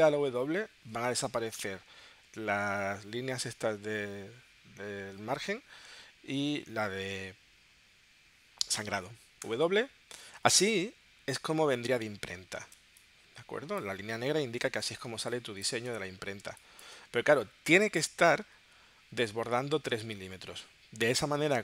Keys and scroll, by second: 9.5 w, 12.7 space, 15.1 space, 15.9 space, 18.8 w, 20.4 w, 21.2 w.